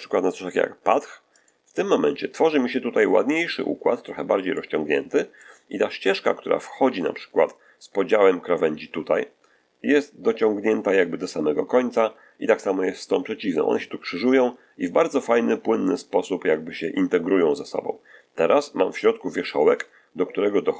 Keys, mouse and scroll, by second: 1.2 click, 4.4-5.5 middle drag, 19.2-19.6 scroll up 1.